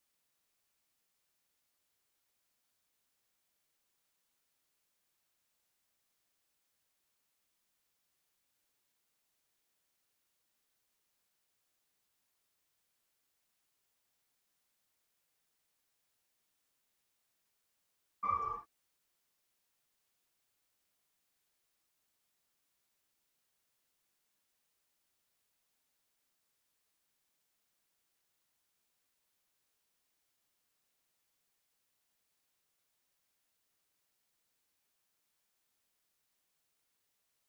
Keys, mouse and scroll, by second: 1.3 middle click, 2.3 middle click, 2.8-4.6 drag, 4.6-8.8 middle drag, 9.7-12.6 middle drag, 12.6-14.5 right drag, 14.0 Tab, 14.5-17.9 middle drag, 18.4 Tab, 20.7-22.6 drag, 24.8-27.8 middle drag, 27.8-29.8 drag, 29.5-32.6 middle drag, 35.3-37.2 drag.